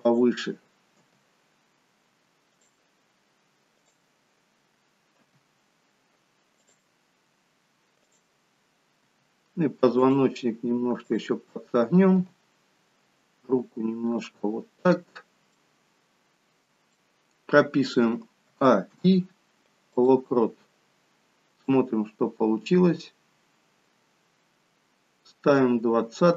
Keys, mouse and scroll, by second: 1.0 g, 3.9 click, 5.6 r, 8.0 click, 9.1 r, 12.3 g, 14.9-15.6 scroll down 2, 15.7 middle click, 15.7-17.9 scroll down 1, 18.5 a, 19.0 i, 21.7 click.